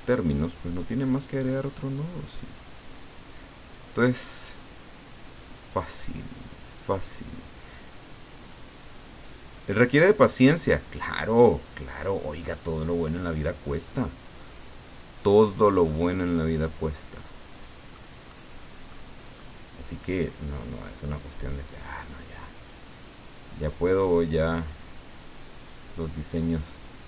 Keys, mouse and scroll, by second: 0.5-2.8 drag, 4.3 click, 5.7-7.1 drag, 8.8-11.1 drag, 11.1 middle click, 14.5-17.8 drag, 17.9 middle click, 18.9 middle click, 21.7-25.8 drag.